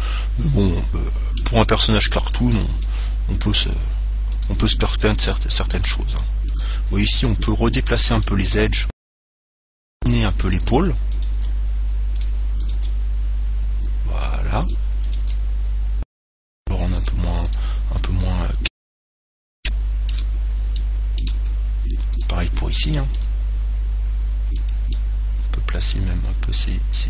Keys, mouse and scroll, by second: 1.7 middle click, 2.5 right click, 3.1 g, 4.8 click, 5.2 right click, 5.6 g, 6.4 click, 6.9 right click, 7.5 g, 8.3 click, 8.3 right click, 8.6-10.3 middle drag, 10.3-14.6 right drag, 10.3 g, 10.8-14.4 drag, 11.6 g, 13.0 g, 14.9 click, 15.3 right click, 15.3 g, 17.3 g, 17.8 click, 17.8 right click, 18.0 middle click, 19.9-22.9 middle drag, 22.4 right click, 23.4 g, 25.3 click, 25.7-27.0 middle drag, 26.8 g.